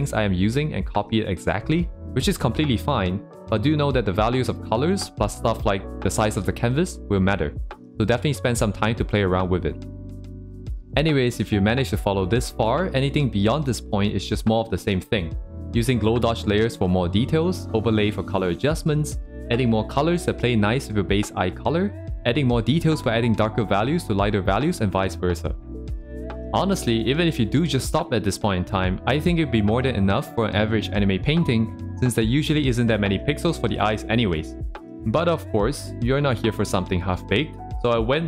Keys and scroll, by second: 1.0 ctrl+z, 4.6 ctrl+z, 13.4 ctrl+z, 32.8 ctrl+z, 37.4 ctrl+z.